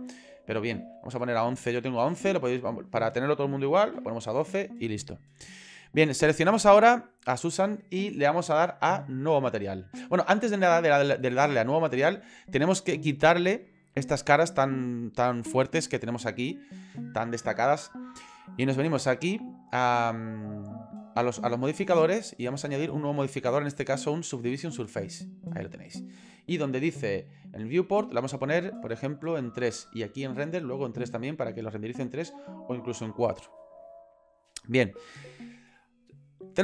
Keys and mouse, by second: 2.7-4.1 drag, 4.3 click, 20.1 click, 22.6-25.1 drag, 25.2 click, 28.1 click, 29.5 click, 29.7 click, 30.6 click, 32.3 click.